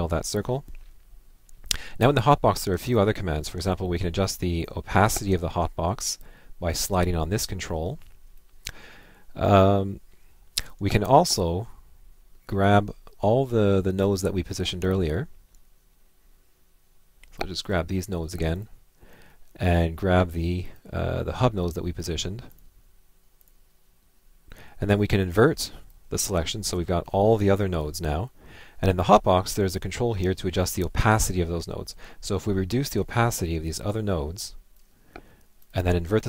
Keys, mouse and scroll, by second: 0.4 Left, 12.6 click, 18.6 Left, 20.6 click, 21.6 click, 22.6 Left, 23.4 Left, 25.2 click, 35.7 Left.